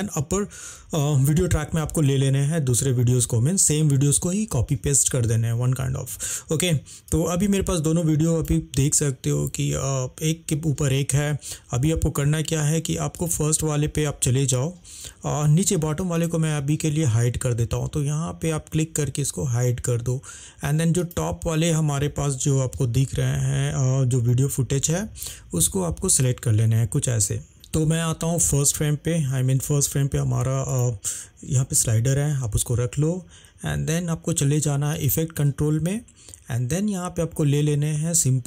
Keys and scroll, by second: 22.3 =, 23.1 =.